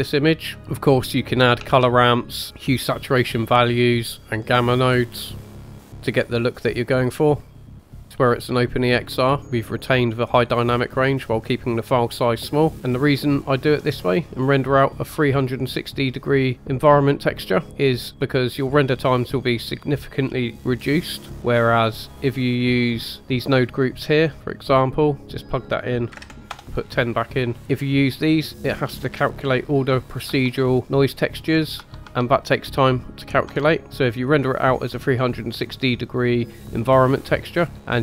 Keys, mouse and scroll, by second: 1.8 shift+a, 4.2 shift+a, 6.0-10.4 drag, 12.7 middle click, 12.7 click, 12.7-14.4 scroll up 4, 18.0-20.1 middle drag, 20.3-21.3 middle drag, 21.3 scroll down 3, 21.8-22.8 drag, 22.9-23.5 scroll up 2, 23.1-24.3 middle drag, 24.3 click, 25.6-27.5 drag, 28.5 Tab, 28.5 click, 28.5 middle click, 28.5-28.9 scroll down 2, 29.0-29.3 scroll up 2, 30.0 click, 30.4 Tab, 30.6-31.0 scroll down 3, 31.5-31.9 scroll up 2, 31.9 Tab, 31.9 click, 32.1 Tab, 33.6 Tab, 33.8-34.5 scroll up 1, 37.1-38.0 scroll up 1.